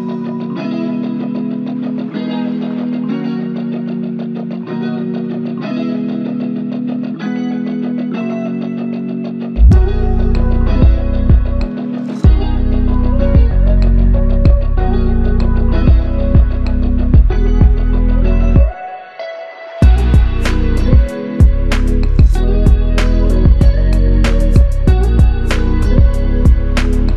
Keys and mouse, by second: 5.7 f, 6.8 double click, 12.6 g, 13.3 alt+click, 14.5 double click, 15.8 shift+click, 17.1 alt+click, 19.4 double click, 20.3 alt+click, 21.3 alt+click, 22.8 double click, 27.0 alt+click.